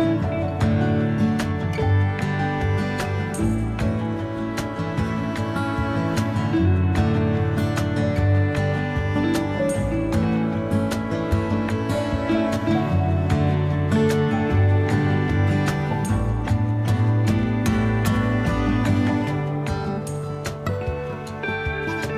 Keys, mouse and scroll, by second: 1.3 g, 3.7 g, 5.8 a, 6.0 a, 6.5 ctrl+s, 13.7 click, 16.6 Tab, 17.9 click, 21.7 click, 22.0 drag.